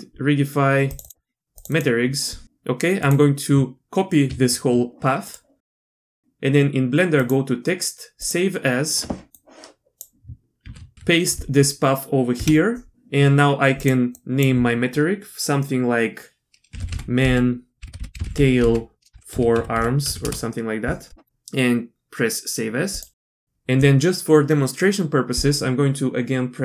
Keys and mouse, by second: 5.5 click, 5.9 click, 7.2-8.4 drag.